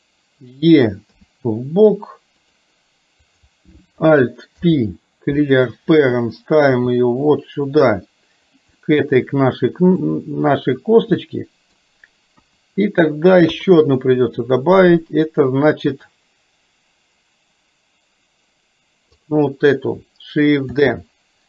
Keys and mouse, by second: 1.2 e, 3.3 click, 4.6 alt+p, 6.8 g, 8.8-10.1 middle drag, 11.3 middle click, 12.4 KP_1, 20.8 shift+d.